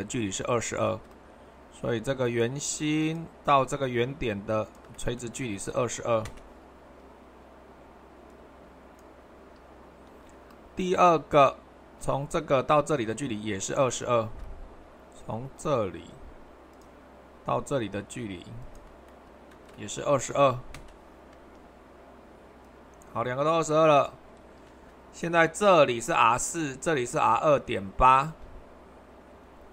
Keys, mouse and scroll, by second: 0.9 super+2, 3.0-4.1 drag, 4.7-5.8 drag, 5.8 typing, 8.3-9.9 drag, 10.1 super+1, 14.2 super+2, 20.3 typing, 22.6-25.9 drag, 28.3 super+2.